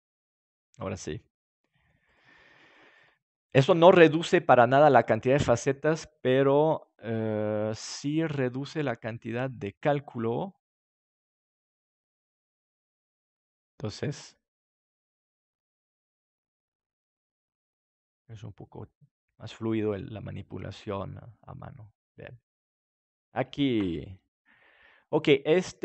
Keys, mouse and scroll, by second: 1.6-2.8 right drag, 3.1-4.9 right drag.